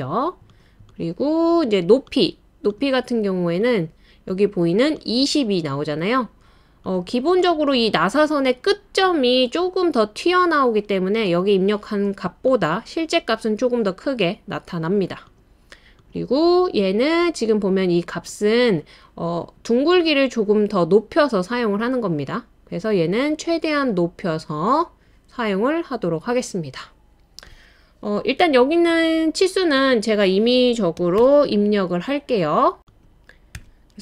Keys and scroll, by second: 30.7-31.7 typing, 33.5 typing.